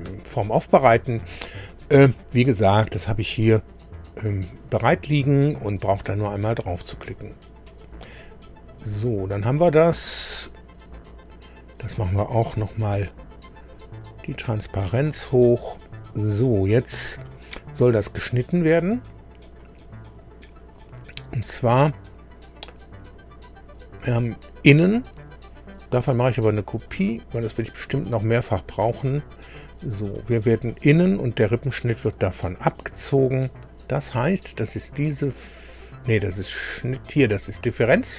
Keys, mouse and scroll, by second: 5.2 click, 6.7 click, 8.3 scroll down 1, 10.0-10.4 scroll down 1, 10.8 click, 12.6 ctrl+d, 14.0-15.4 drag, 19.6 click, 20.6 scroll down 1, 24.1 click, 26.9 click, 28.7-29.0 scroll down 1, 29.5 click, 30.2 click, 31.3 ctrl+click.